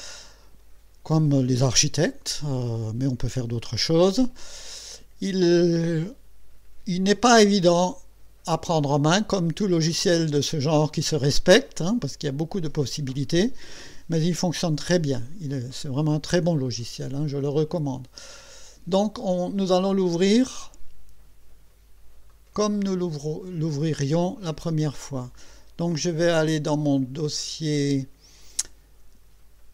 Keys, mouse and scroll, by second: 22.3 click, 24.2 click, 25.9 click.